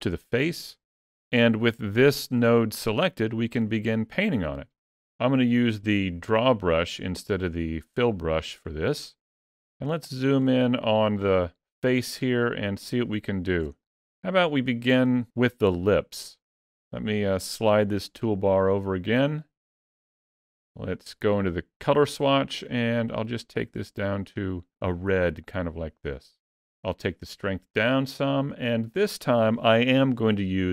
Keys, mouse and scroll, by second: 1.9 click, 6.1 click, 8.4-9.1 scroll up 5, 8.8 middle click, 9.4 shift+middle click, 10.2 ctrl+middle click, 12.2 ctrl+middle click, 13.0 shift+middle click, 13.6 middle click, 17.7 middle click, 20.7 click, 27.5 click.